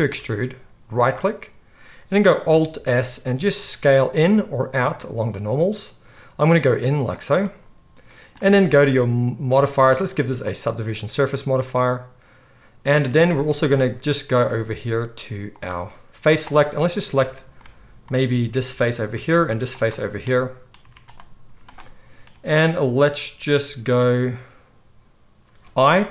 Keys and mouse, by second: 0.1 e, 0.6-9.5 middle drag, 2.8 alt+s, 9.5-16.5 drag, 16.5-19.8 middle drag, 19.8 shift+click, 20.0-26.1 middle drag, 20.8 z, 21.4 z.